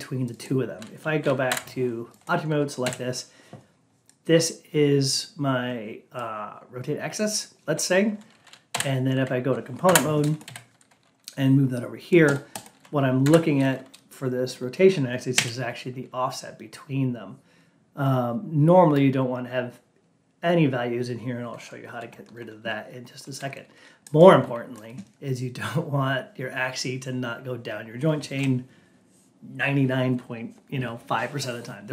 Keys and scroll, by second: 1.4 F8, 9.8 F8.